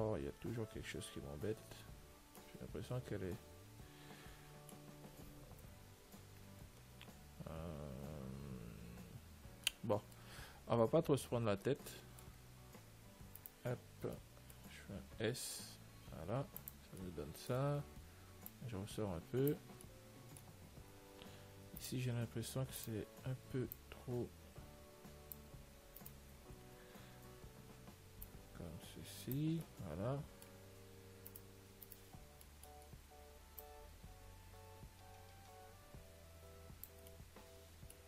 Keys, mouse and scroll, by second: 0.1-1.1 scroll up 1, 1.1-2.4 scroll up 1, 2.4-4.6 middle drag, 5.9-7.1 scroll up 1, 7.1-9.2 middle drag, 10.0-16.4 middle drag, 11.1 Tab, 13.7-15.4 right drag, 15.1 s, 17.3-19.8 middle drag, 18.8 click, 20.1-22.0 middle drag, 22.1-24.9 right drag, 24.0 click, 26.3-28.2 right drag, 26.6-28.0 middle drag, 28.2 middle click, 28.6 click, 29.9-35.5 middle drag, 31.6-33.9 right drag, 33.9 click, 37.4-38.0 middle drag.